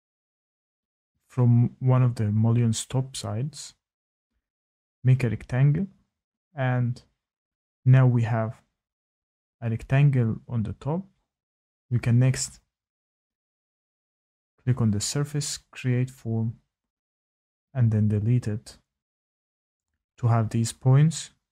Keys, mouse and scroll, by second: 0.3 click, 1.2-3.2 scroll, 3.2 click, 4.9 click, 7.0 click, 8.8 Escape, 9.2 Escape, 10.3 click, 11.4 click, 15.0 click, 15.8-16.4 scroll, 16.4-17.5 scroll down 3, 17.5 Delete, 18.9 click, 19.2 click, 20.0 click.